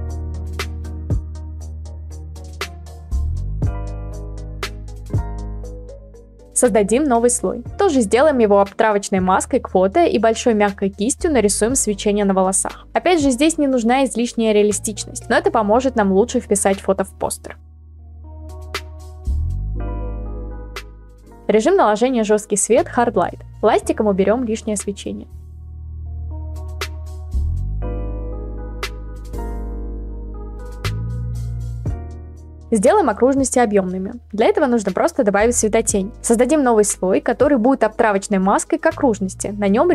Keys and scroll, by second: 4.8 b, 7.1 b, 8.2 ], 8.3 ], 8.4 ], 10.4 ctrl+z, 11.2 ctrl+z, 23.0-25.1 typing, 36.9 ctrl+z, 38.7 b, 39.6 ctrl+z.